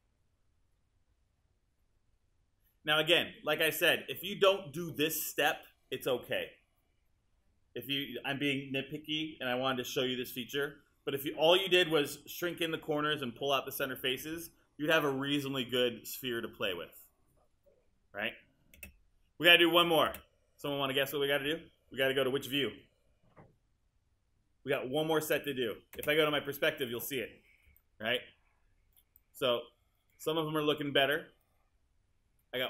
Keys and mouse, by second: 18.8 space, 26.0 space.